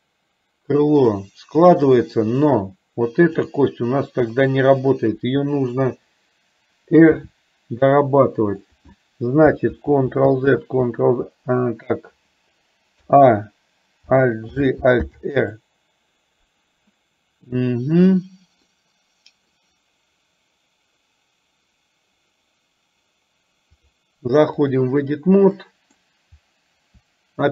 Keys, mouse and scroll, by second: 7.3 r, 9.8 ctrl+z, 10.6 ctrl+z, 13.1 a, 14.6 alt+g, 15.2 alt+r, 18.8 middle click, 24.1-24.9 drag, 25.7 middle click.